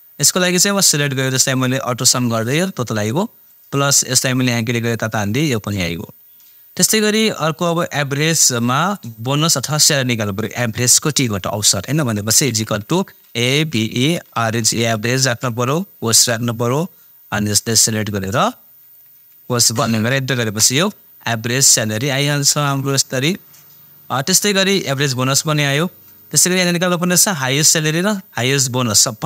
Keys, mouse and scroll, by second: 0.8-7.0 drag, 12.4-16.2 typing, 17.7-19.9 drag, 19.9 shift+0, 20.4 Return, 21.7-24.3 drag.